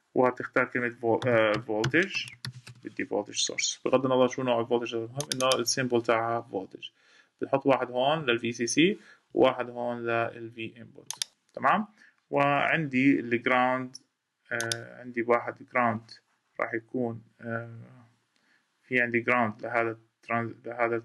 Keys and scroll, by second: 12.3 ↺.